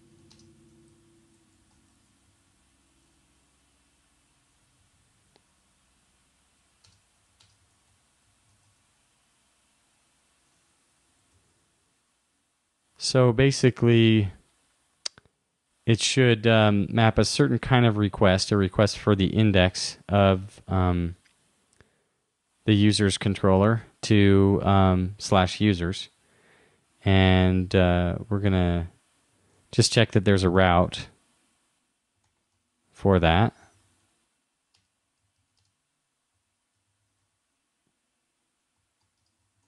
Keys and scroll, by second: 0.3 shift+., 5.0 shift+], 11.4 super+Right, 30.6 shift+-, 32.1-33.0 typing, 35.4 shift+., 39.4 shift+;.